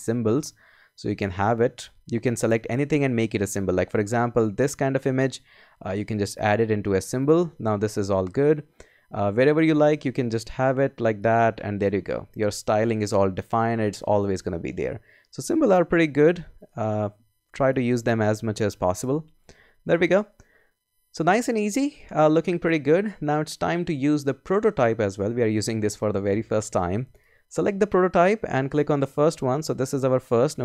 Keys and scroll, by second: 19.0 BackSpace.